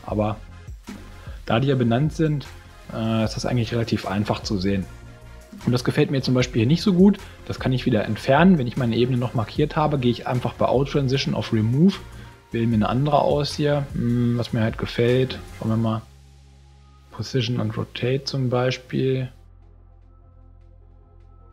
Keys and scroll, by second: 0.9 space, 5.5 space, 6.8 space.